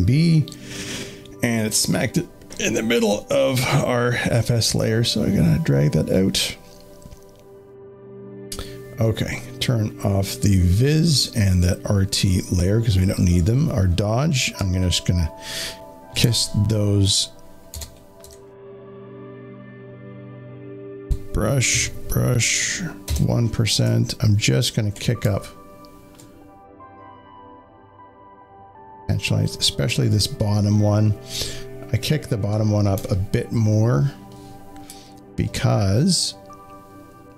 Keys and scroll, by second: 14.8 z, 16.1 space, 16.2 space, 16.3 space, 17.6 b, 18.1 shift+1, 20.9 b, 23.0 shift+1, 32.9 space, 33.1 space.